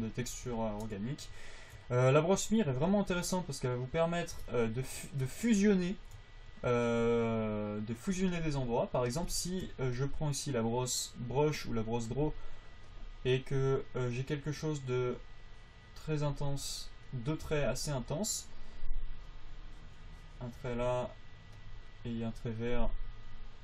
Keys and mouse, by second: 3.0 f, 16.8 f, 17.8 f, 23.5-23.6 drag.